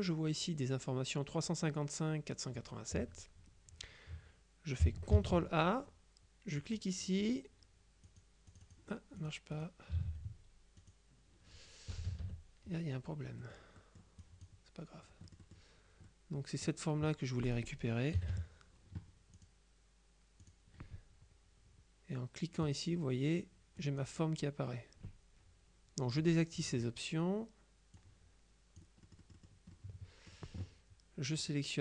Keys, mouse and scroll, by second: 5.2 ctrl+a, 6.7 click, 8.2 click, 9.6 click, 10.0 ctrl+a, 10.9 click, 12.0 KP_Subtract, 13.5-15.0 drag, 14.3 right click, 15.3 middle click, 15.5 click, 16.6 click, 17.5 click, 18.2 KP_Subtract, 19.4 click, 20.5 click, 22.7 click, 23.9 click, 26.3 click, 28.0-30.0 drag, 31.5 click.